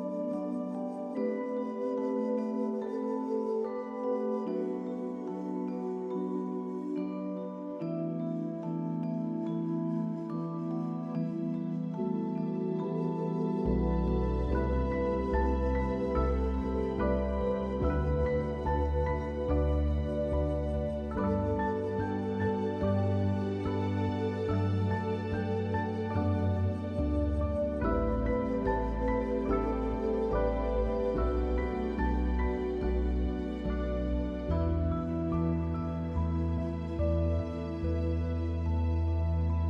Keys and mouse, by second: 0.1 shift+click, 0.3 shift+click, 0.6 click, 1.0 shift+click, 1.4 shift+click, 1.7 shift+click, 2.5 shift+click, 2.9 click, 3.7 shift+middle click, 4.3 middle click, 5.1 shift+middle click, 6.6 middle click, 7.7 shift+click, 7.9 middle click, 9.4 middle click, 9.8 shift+click, 10.5 shift+click, 10.8-11.8 drag, 12.0 shift+click, 13.2 shift+click, 14.4 click, 15.9 click, 25.6 click, 26.3 middle click, 28.9-29.9 middle drag, 31.9-35.1 right drag.